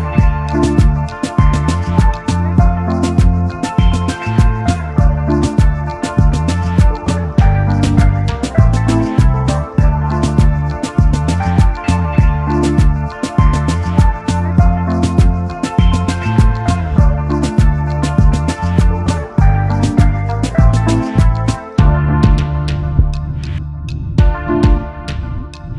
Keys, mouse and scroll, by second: 11.0 alt+scroll up 1, 15.3 alt+scroll down 1, 17.5 double click, 17.8 alt+scroll down 1, 18.0 space, 21.7 alt+scroll up 1, 22.0 alt+scroll down 1, 22.2 space, 25.0 space, 25.2 alt+click.